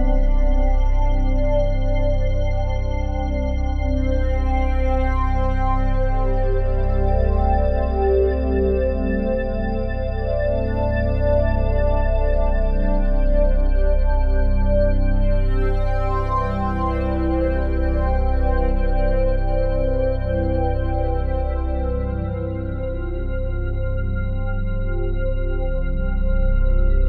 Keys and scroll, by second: 1.7 ctrl+z, 3.5 ctrl+z, 18.7 ctrl+z.